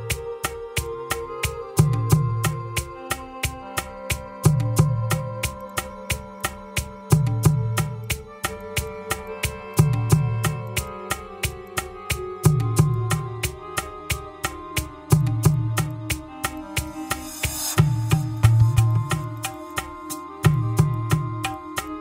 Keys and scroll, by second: 9.6 ctrl+c, 10.1 ctrl+v, 10.3 Return, 11.3 ctrl+c, 11.9 Return, 13.1 Return, 18.6 Return, 21.1 Return.